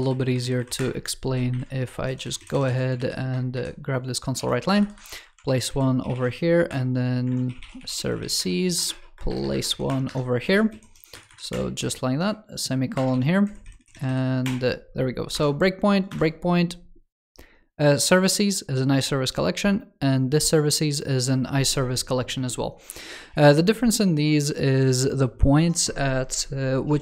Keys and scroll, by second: 1.4 shift+super+], 2.8 super+c, 3.4 shift+super+[, 4.2 super+v, 5.3 super+Right, 7.1 alt+BackSpace, 10.3 super+v, 12.9 super+s.